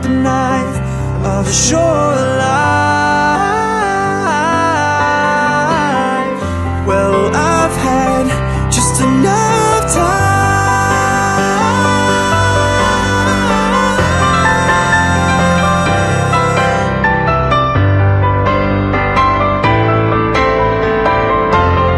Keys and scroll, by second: 10.7 ctrl+z, 12.2 ctrl+z, 16.7 ctrl+z.